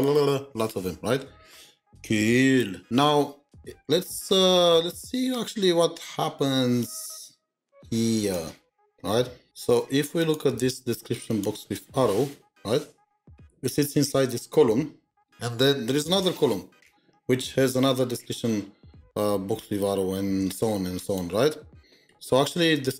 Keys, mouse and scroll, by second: 2.5-3.0 scroll down 1, 3.0-4.0 scroll up 3, 4.0-5.3 scroll up 4, 5.3-6.8 scroll up 1, 12.4-13.9 scroll up 8, 13.9-14.4 scroll down 1, 16.7-17.3 scroll down 1, 17.3-18.8 scroll down 1, 21.6-22.4 scroll down 1, 22.4-22.9 scroll up 1.